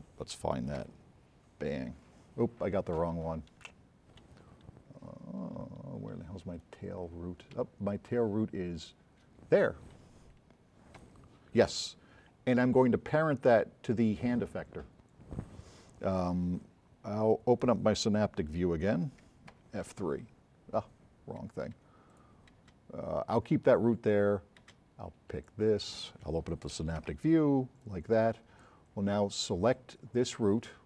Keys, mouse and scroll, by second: 0.9 f, 1.7 middle click, 1.9 middle click, 2.0 scroll down 4, 3.7 a, 4.5-5.5 scroll up 7, 5.8-6.1 scroll down 4, 6.4 s, 6.6 right click, 8.9 click, 11.1 f, 13.5 scroll down 1, 19.6 F3, 22.1 click, 22.7 space, 24.8 space, 27.0 F3, 27.9-28.2 drag, 30.2 middle click.